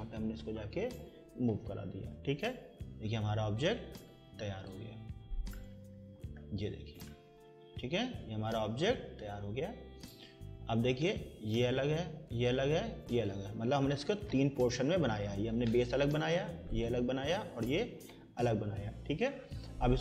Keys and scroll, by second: 1.8 Escape, 14.5 Escape, 18.3 Escape.